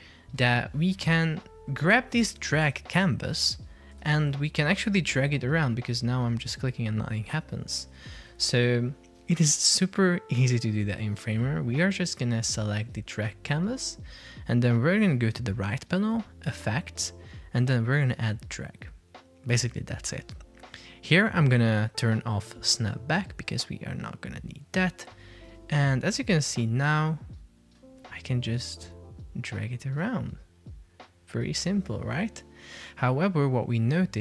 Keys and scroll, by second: 4.1 super+p, 7.6 Escape, 25.6 super+p.